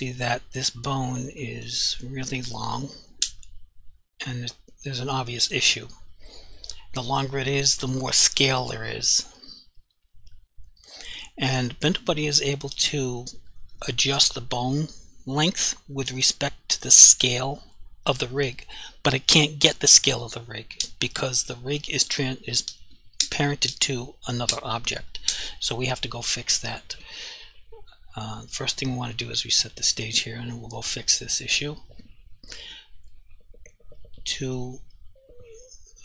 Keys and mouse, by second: 29.7 click, 34.5 click.